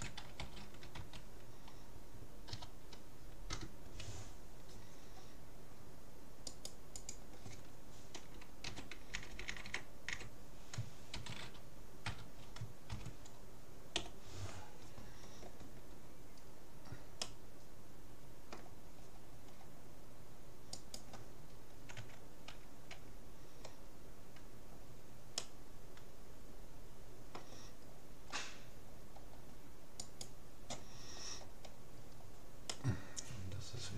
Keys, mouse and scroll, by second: 6.6-8.4 right drag, 9.4 Left, 16.4-20.8 middle drag, 20.8-22.4 right drag, 22.0 Tab, 25.4-27.0 middle drag, 28.0-30.0 middle drag, 30.0-31.6 right drag, 30.4-33.9 middle drag.